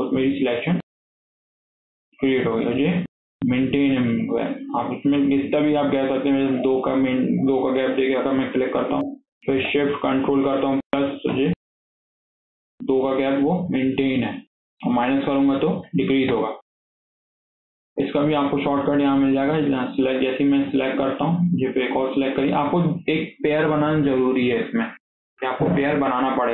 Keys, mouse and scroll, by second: 1.0 ctrl+shift+KP_Add, 1.3 ctrl+shift+KP_Add, 1.5 ctrl+shift+KP_Add, 2.3 alt+z, 2.5 middle click, 3.0-3.4 scroll up 2, 4.4 shift+middle click, 5.2 click, 8.4 shift+click, 10.7 ctrl+shift+KP_Add, 11.2 ctrl+shift+KP_Add, 12.1 alt+z, 12.3 scroll down 1, 12.5-13.4 middle drag, 13.4 alt+z, 13.6-15.2 middle drag, 15.2 ctrl+shift+KP_Subtract, 15.4 ctrl+shift+KP_Subtract, 15.7 ctrl+shift+KP_Subtract, 16.2 ctrl+shift+KP_Subtract, 17.2 KP_1, 17.9 click, 18.7 click, 20.6 click, 21.6 shift+click.